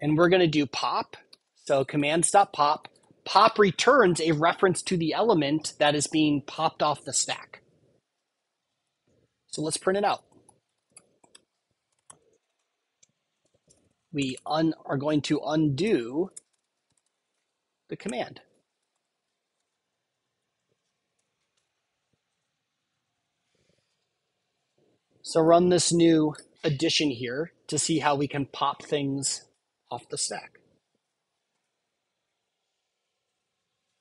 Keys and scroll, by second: 8.7 Return, 18.0 Tab, 18.4 super+Right, 19.7 Down, 23.0 super+s.